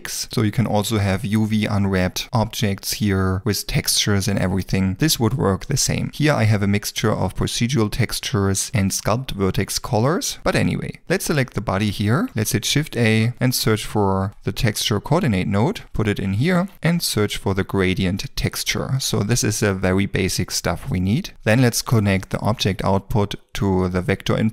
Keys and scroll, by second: 12.4-14.3 typing, 16.7 typing.